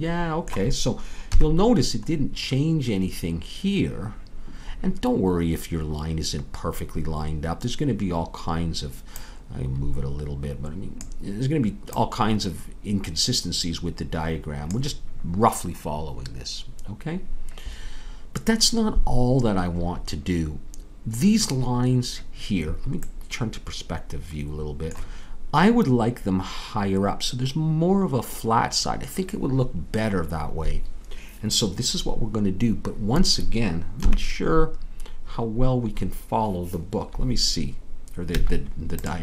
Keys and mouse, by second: 1.3 KP_3, 34.0 KP_3, 38.3 z.